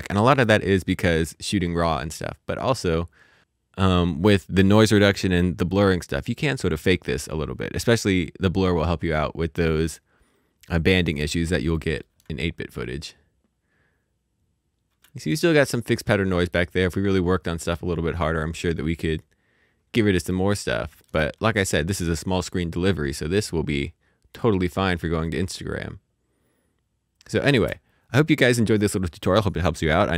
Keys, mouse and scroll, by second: 8.8 scroll down 1, 9.4-10.6 scroll up 1, 12.0 space, 15.0 space, 15.5-16.1 scroll up 1, 16.1 middle click, 16.7-17.4 scroll up 1, 17.4-18.4 scroll down 1, 18.4 middle click, 19.1-20.2 scroll down 1, 20.2 middle click, 21.0 space, 27.9 space.